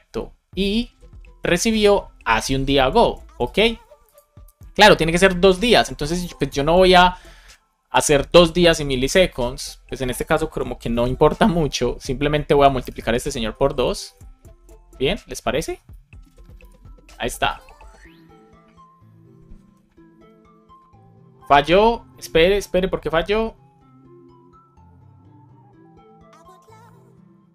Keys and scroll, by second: 10.9 super+c, 11.1 Left, 11.5 shift+9, 12.4 super+Right, 12.7-14.5 typing, 16.2 alt+shift+f, 16.6 super+s.